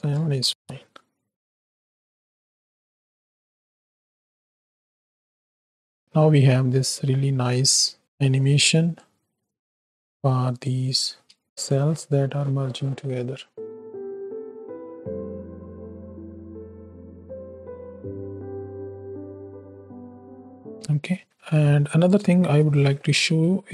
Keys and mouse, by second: 1.4 click, 1.5 space, 8.0 space, 9.0-10.7 drag, 11.4 space, 20.7 space, 23.0 middle click.